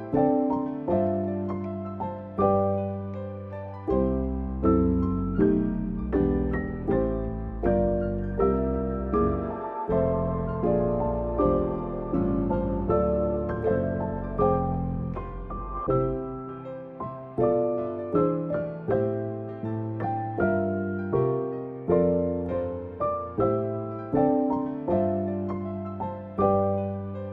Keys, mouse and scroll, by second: 1.1 s, 4.2 Tab, 5.0 scroll down 4, 5.3 middle click, 7.6 click, 9.6 click, 11.9 Tab, 12.3 shift+middle click, 13.0 click, 13.6 middle click, 14.2 click, 14.5 click, 14.7 alt+q, 15.0 middle click, 15.4 shift+click, 15.6 middle click, 15.8-16.2 scroll down 2, 16.2 shift+click, 16.7 shift+middle click, 17.0 middle click, 17.9 `, 20.9 middle click, 22.3 click, 22.9 middle click, 25.6 click, 26.2 middle click, 27.0 click.